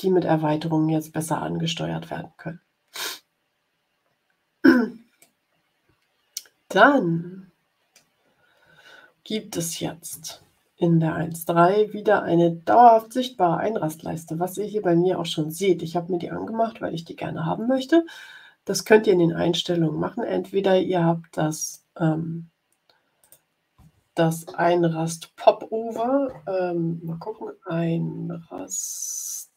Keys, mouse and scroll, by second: 2.9-4.8 drag, 5.1-6.3 drag, 6.9-8.1 drag, 21.5 click, 23.1 click, 26.9-28.8 typing.